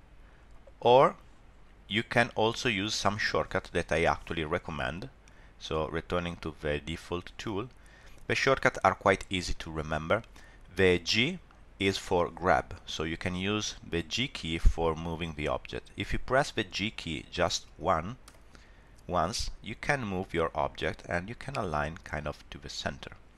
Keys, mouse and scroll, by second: 2.3 click, 5.6 click, 7.6 scroll down 2, 8.1 scroll up 1, 18.2 g.